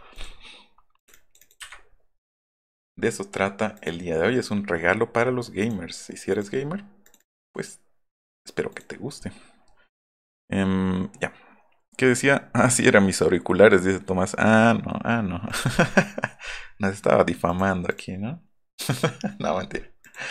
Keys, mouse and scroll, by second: 0.1 click, 1.0 click, 2.6 click, 3.7 click, 8.7 click, 17.5 click, 18.9 click, 20.1 click.